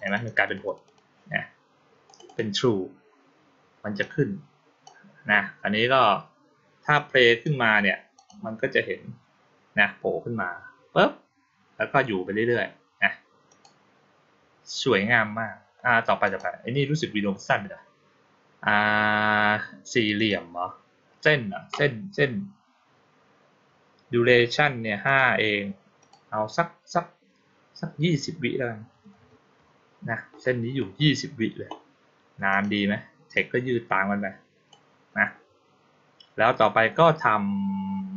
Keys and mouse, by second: 0.1 click, 0.3 click, 0.5 click, 0.7 click, 1.9 click, 2.1 click, 3.9-4.7 drag, 6.8-7.3 drag, 8.0 click, 13.3 click, 16.1 click, 20.0 click, 24.9 click, 25.9 click, 32.4 click, 33.2-34.6 drag.